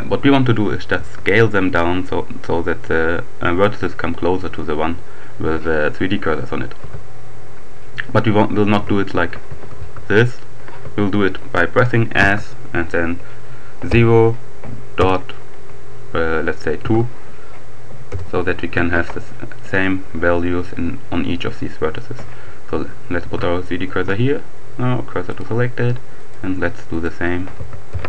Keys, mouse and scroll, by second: 1.0 s, 6.8 Escape, 8.4 r, 9.7 s, 10.8 Escape, 12.0 s, 13.0 0, 14.3 ., 16.2 2, 17.2 Return, 19.6 right click, 23.0 shift+s, 25.1 click, 26.2 shift+right click, 26.9 shift+click, 27.4 s, 27.9 0.